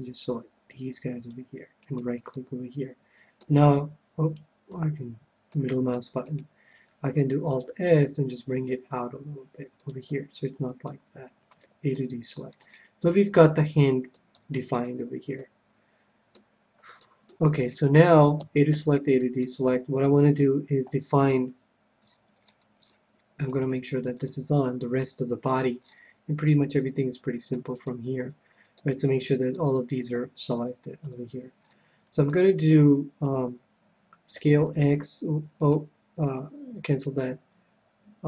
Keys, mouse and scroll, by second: 1.9-3.7 right drag, 2.3-4.0 middle drag, 4.7 c, 6.5-8.3 right drag, 7.5 alt+s, 9.8-11.6 drag, 10.0-16.1 middle drag, 11.5 a, 14.3 KP_1, 16.2-18.4 middle drag, 18.4 a, 18.7 a, 19.4-21.4 middle drag, 21.1 c, 23.4-25.4 right drag, 24.1-26.0 drag, 24.9 c, 27.7-29.5 right drag, 28.7-30.1 middle drag, 30.1 KP_3, 31.0 KP_1, 31.5-34.0 middle drag, 34.3 s, 35.7-37.6 right drag.